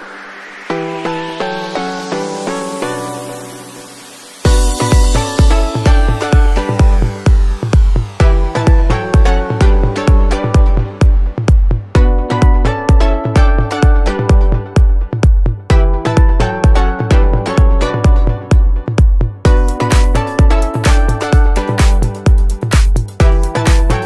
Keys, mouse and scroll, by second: 1.5 click, 2.0 click, 2.2 middle click, 2.7 g, 5.0 middle click, 6.3 middle click, 6.9 click, 7.1 shift+middle click, 7.2 shift+middle click, 7.7 click, 8.5 e, 10.7 middle click, 10.9-11.5 scroll down 3, 11.2 middle click, 11.5-12.1 scroll up 2, 11.9 Tab, 12.1 middle click, 12.6 scroll up 2, 12.9 shift+middle click, 13.1 middle click, 13.5 KP_1, 13.9 KP_5, 14.3 shift+middle click, 15.2 scroll down 1, 15.3 shift+middle click, 16.1 ctrl+alt+KP_0, 17.3 n, 17.9 click, 18.2 click, 19.0 click, 19.1 n, 19.4-19.9 scroll down 2, 20.7-21.0 scroll up 1, 22.0 click, 23.9 click.